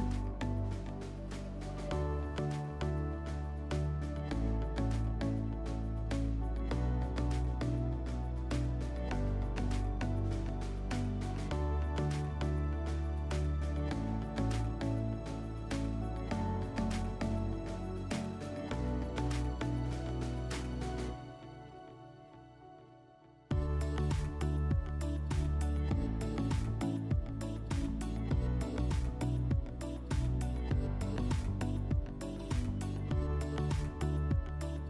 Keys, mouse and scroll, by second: 1.1 click, 2.8 click, 3.6 click, 5.2 click, 8.9 click, 10.5 click, 11.0 e, 14.0 click, 14.6 ctrl+z, 16.0 r, 18.4 click, 19.4 w, 21.7 click, 24.2 click, 25.7 click, 27.8 click, 29.8 click, 32.1 click, 33.9 click.